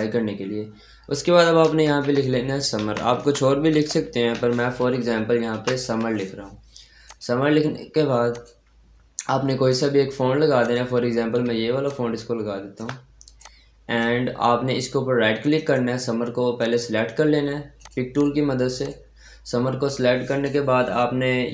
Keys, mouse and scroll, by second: 0.5-1.7 scroll up 1, 1.5-2.4 typing, 3.8-5.7 typing, 6.9 click, 11.7-15.4 shift+drag, 15.4 right click, 16.4 click, 20.2 right click.